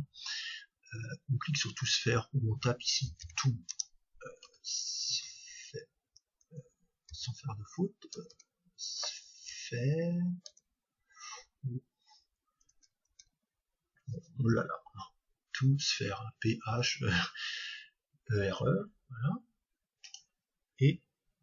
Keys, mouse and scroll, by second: 8.3 BackSpace.